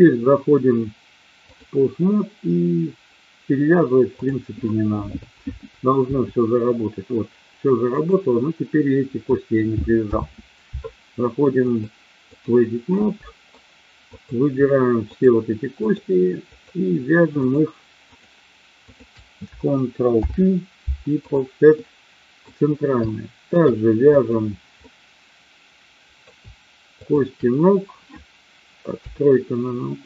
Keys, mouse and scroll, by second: 4.1-5.0 drag, 6.1 r, 7.8 click, 10.0 ctrl+z, 11.6-12.3 drag, 13.0 middle click, 14.1 click, 15.1 shift+click, 15.7 shift+click, 16.5 shift+click, 17.5 shift+click, 18.0 shift+click, 18.8 shift+click, 20.1 ctrl+p, 21.7 middle click, 23.1 shift+middle click, 24.1 click, 24.8-26.2 middle drag, 27.0 shift+click, 28.8 KP_3.